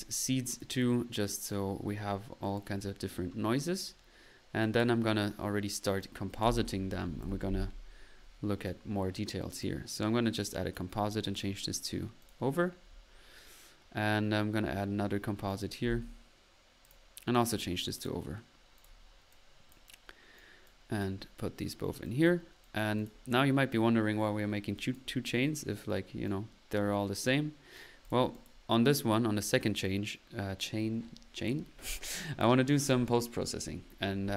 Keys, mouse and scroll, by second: 0.2 click, 0.6 click, 1.4-1.7 typing, 1.5-1.9 drag, 3.9 click, 4.6-5.0 drag, 5.8 click, 6.4-7.2 typing, 8.6 click, 9.6 click, 10.4-11.1 drag, 11.3-11.8 drag, 12.2 click, 13.4-14.2 typing, 15.5 click, 15.8 typing, 16.8 click, 17.3 click, 18.0-18.5 drag, 18.8 click, 19.3 click, 20.4 click, 20.7-21.6 right drag, 22.5-23.5 drag, 24.8 click, 26.3 right click, 27.2 right click, 28.2 drag, 28.5 drag, 28.8-29.1 middle drag, 32.1 click, 33.9 middle click.